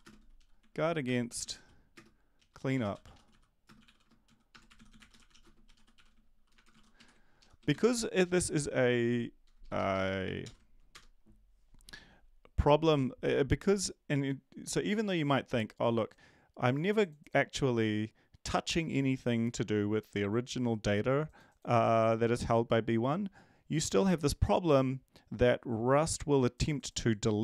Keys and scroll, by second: 0.0-8.2 typing, 7.3 ctrl+Left, 10.4 ctrl+., 10.9 Return.